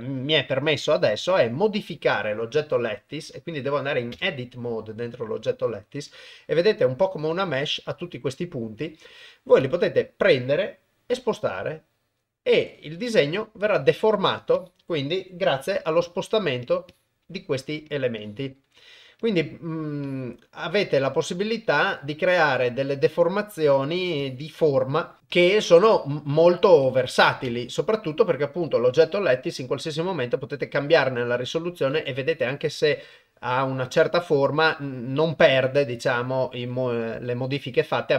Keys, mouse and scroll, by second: 4.3 Tab, 11.1 g, 14.7 click, 15.8 g, 16.9 click, 17.2 g, 18.4 click, 20.1 click, 20.6 g, 22.4 click, 24.3 click, 25.2 g, 25.5 click, 27.5 Tab, 31.5 click, 34.3 click, 35.2 click.